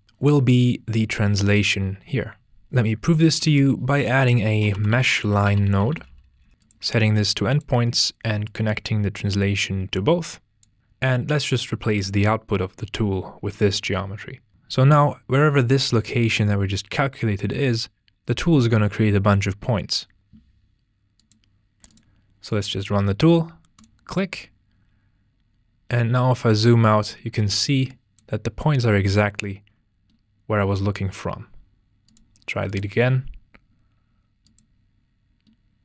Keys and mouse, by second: 3.5 shift+a, 6.6-7.7 drag, 11.7 drag, 21.2-23.8 drag, 27.9 click, 32.1-34.7 drag.